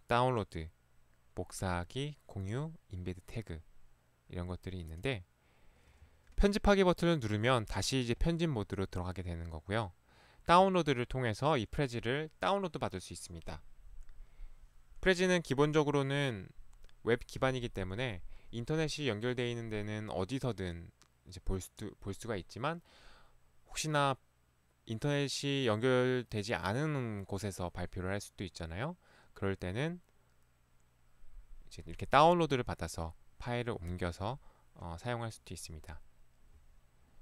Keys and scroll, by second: 6.1 Escape.